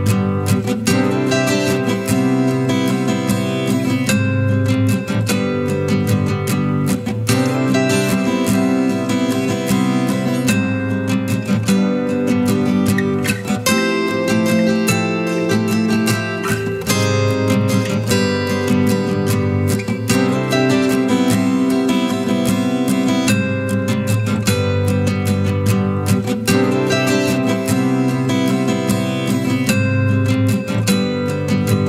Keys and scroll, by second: 3.5 ctrl+t, 11.5 ctrl+t.